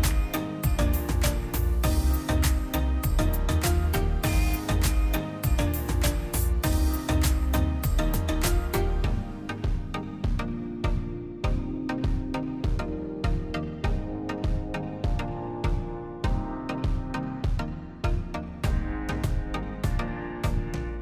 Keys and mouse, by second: 1.3 click, 2.2-3.7 drag, 7.6 middle click, 7.8-8.6 drag, 9.7 click, 11.0-11.8 drag, 12.3-13.5 drag, 14.3 click, 15.3 click, 15.7 click, 16.3 middle click, 16.6-17.3 drag, 17.7 middle click, 18.1 middle click, 18.4 click, 18.7 shift+d, 19.2 drag, 19.7 click, 20.4 click, 20.8 middle click.